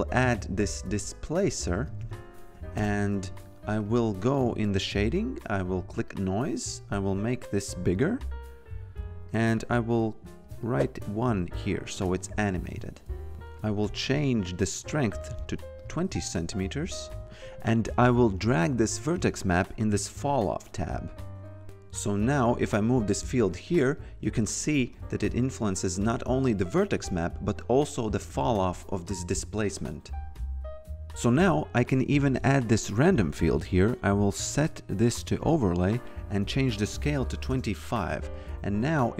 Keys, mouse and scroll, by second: 0.0-2.6 typing, 2.7 Return, 2.7 KP_Enter, 3.8 click, 7.2 click, 7.6 shift+click, 10.4 click, 11.9 f, 12.8 click, 13.6 click, 17.8 click, 21.6 f, 22.3 click, 27.0 click, 31.1 f, 32.0 click, 34.5 click, 36.7-37.4 typing, 37.5 Return, 38.6 click.